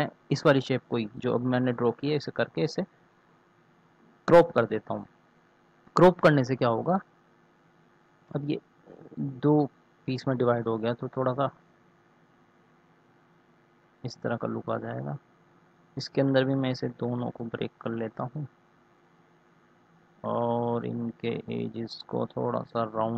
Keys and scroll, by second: 8.6 Delete.